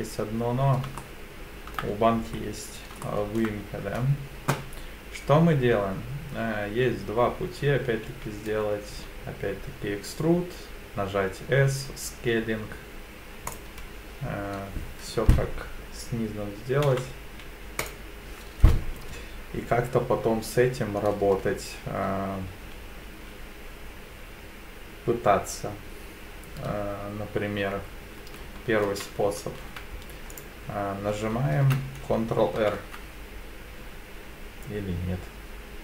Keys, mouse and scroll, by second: 1.0 shift+middle click, 2.3-3.0 scroll up 2, 3.0 shift+middle click, 8.1 e, 8.9 s, 13.5-16.5 drag, 16.9 m, 28.9 ctrl+r, 32.5 ctrl+r.